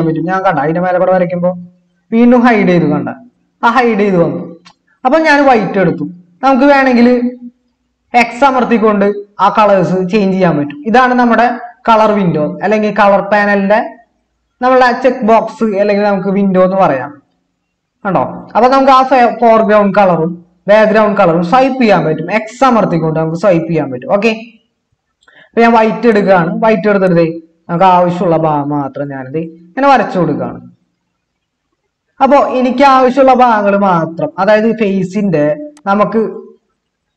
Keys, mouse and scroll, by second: 11.4 typing, 20.6 typing, 22.8 typing, 24.0 typing.